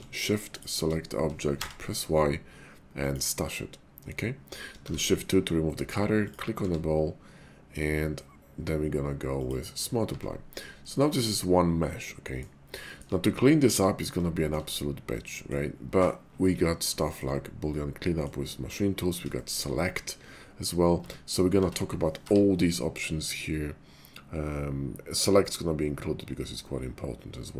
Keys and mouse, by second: 1.5 y, 4.8 shift+2, 5.6 click, 6.5 q, 10.1 Tab, 11.0 shift+click, 11.4-12.4 drag, 12.9 shift+click, 14.3 shift+middle click, 15.1 middle click, 17.1 shift+middle click, 17.7 middle click, 19.3 shift+middle click, 21.0 Tab, 21.5 Tab, 22.1 y.